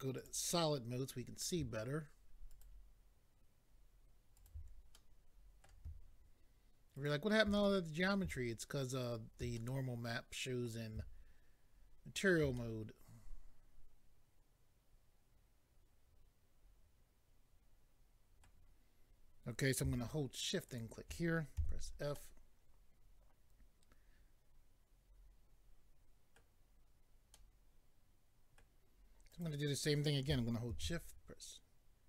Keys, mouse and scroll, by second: 0.2 click, 2.5 ctrl+right click, 4.4 ctrl+right click, 4.9 middle click, 6.9 ctrl+right click, 7.6 middle click, 8.9 ctrl+right click, 9.6 middle click, 12.5 middle click, 20.7 shift+click, 21.6 f, 22.1 middle click, 27.3 middle click, 29.3 click, 30.7 d.